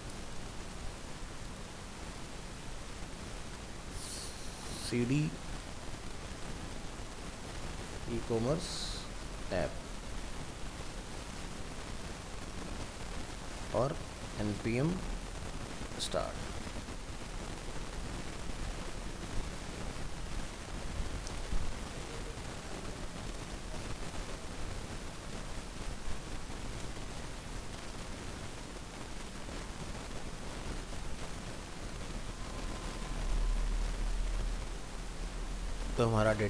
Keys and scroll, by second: 11.5 ctrl+c.